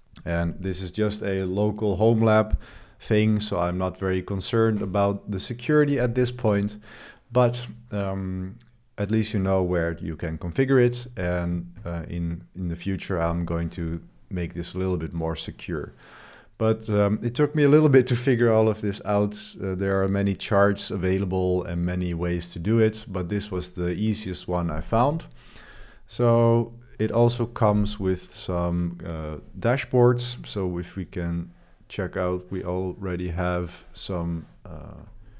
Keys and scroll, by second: 3.6 super+1, 3.9 super+1.